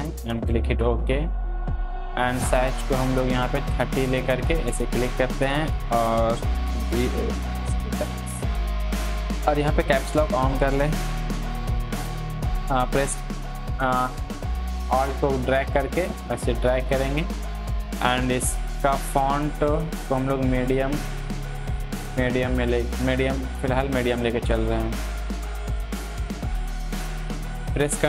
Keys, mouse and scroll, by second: 6.5-8.3 typing, 10.0 click, 11.5 ctrl+t, 13.1-16.9 alt+drag, 20.3 click, 23.2 click, 23.2-25.5 drag, 25.5-27.7 drag, 27.7 ctrl+t.